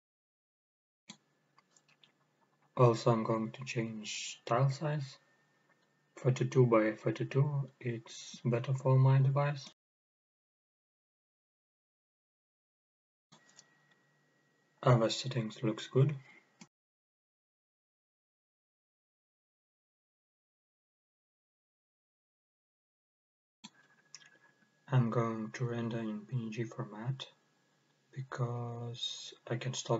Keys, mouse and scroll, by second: 1.9-3.4 drag, 3.9-6.2 drag, 8.2 click, 13.6 click, 14.8 click, 16.1-16.5 scroll down 1, 16.5-16.9 scroll up 1, 16.9-18.4 scroll down 1, 18.4-18.9 scroll up 1, 24.3 click, 26.9-28.8 scroll down 1, 28.8-29.9 drag.